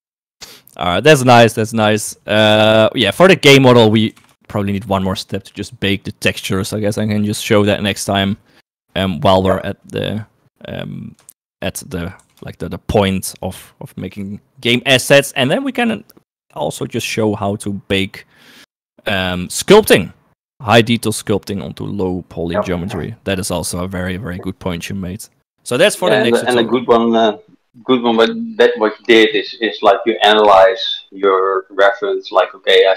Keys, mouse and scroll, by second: 2.0 right click, 2.8 g, 11.6 shift+middle click, 12.4 s.